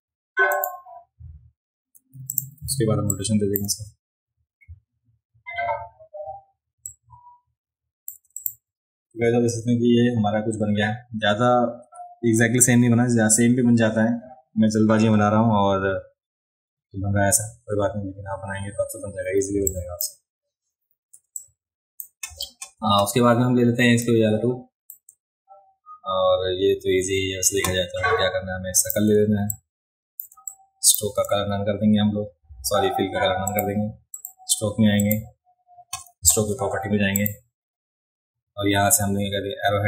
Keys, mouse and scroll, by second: 0.5 click, 2.3 click, 3.1 click, 6.9-8.1 shift+drag, 8.4 click, 19.6-20.0 drag, 21.2 space, 21.3 click, 24.0 click, 28.8 click, 29.5 shift+click, 30.3 space, 30.5 click, 33.5 click, 34.1 click, 35.0 click, 37.2 click.